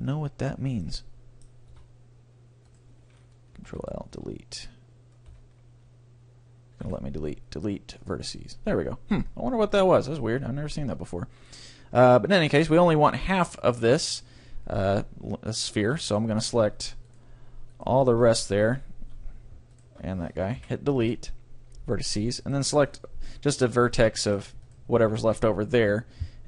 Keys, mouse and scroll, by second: 0.5-2.5 middle drag, 1.7 a, 2.7-4.4 right drag, 3.7 ctrl+l, 4.1 \, 6.9 Delete, 9.1 middle click, 9.3 middle click, 9.7 middle click, 10.0-11.6 middle drag, 12.1-13.7 middle drag, 16.1-19.6 right drag, 19.7-21.5 right drag, 20.5 Delete, 22.5-23.9 right drag, 24.2 middle click, 25.3 ctrl+l, 26.2 right click.